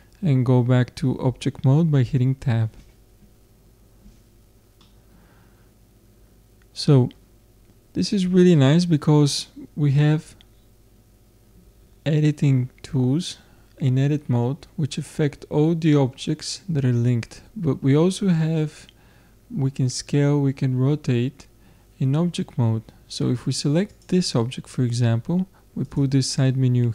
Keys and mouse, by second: 4.8-23.9 middle drag, 23.9-25.7 drag, 25.9-26.9 drag.